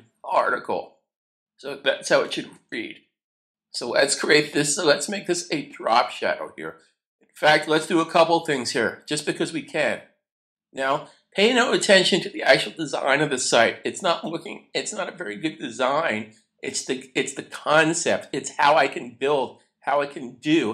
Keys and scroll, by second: 2.5 super+s.